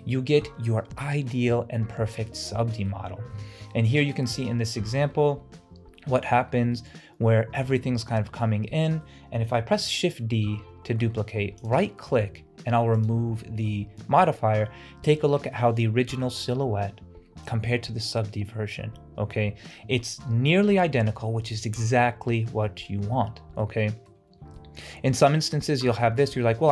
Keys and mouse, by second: 0.1 middle click, 2.8 middle click, 3.4 KP_Decimal, 4.2-5.6 middle drag, 6.8-7.7 middle drag, 8.7-9.1 middle drag, 9.8 shift+d, 13.1-14.2 drag, 14.2-15.6 middle drag, 23.6-24.1 middle drag, 24.6-25.0 middle drag.